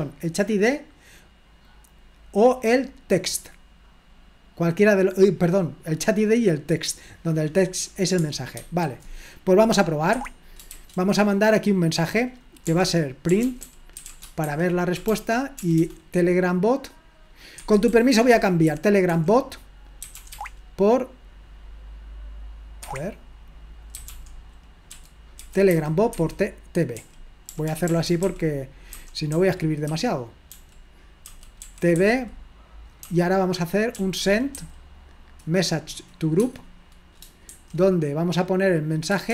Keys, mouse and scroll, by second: 0.0 click, 1.6 click, 2.8 click, 4.0 click, 6.0 click, 6.8 click, 8.7 super+1, 10.1 Escape, 10.7 g, 12.7-15.8 typing, 17.6 Escape, 17.9-20.8 typing, 22.8 Escape, 24.0-35.0 typing, 36.4 Tab.